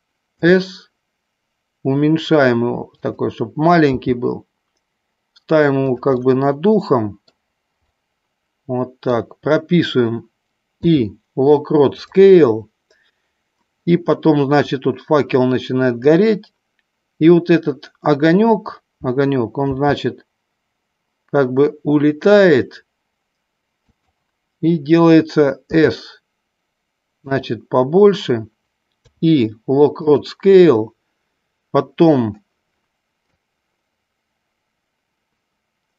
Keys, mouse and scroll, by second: 0.4 s, 3.2 click, 4.3 g, 6.4-7.6 middle drag, 8.1-9.0 middle drag, 9.1 middle click, 10.9 i, 15.1-16.5 drag, 19.6 g, 24.1 click, 25.6 s, 27.5 click, 29.0 i, 33.8-35.9 drag.